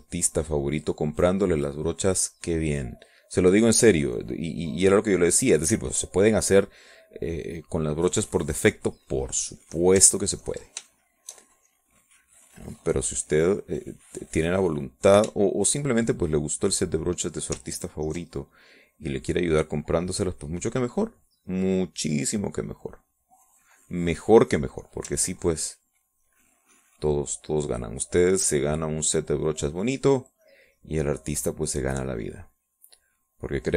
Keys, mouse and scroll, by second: 0.5-3.6 drag, 3.7-7.9 drag, 8.7 middle click, 9.7 middle click, 10.2 middle click, 10.7 middle click, 11.7 ctrl+click, 12.8-16.7 shift+drag, 16.7 shift+click, 17.1-18.4 shift+drag, 19.3 ctrl+click, 20.3-24.6 drag, 26.4 ctrl+click, 27.5-33.7 drag.